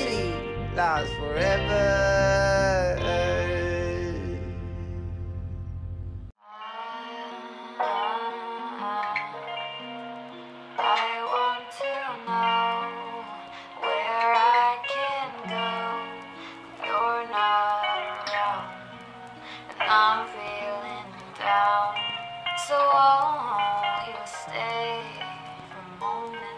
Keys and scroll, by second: 22.3 ctrl+shift+c.